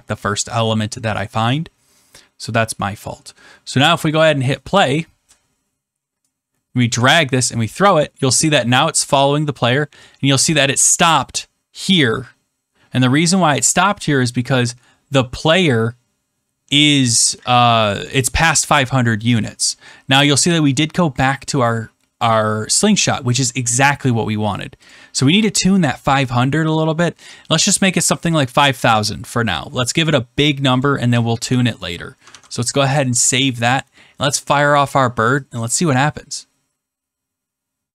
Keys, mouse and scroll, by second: 4.0 click, 7.0 click, 24.8 click, 29.5 click, 30.7 click, 31.4 0, 32.2 ctrl+s, 33.4 click, 36.0 click.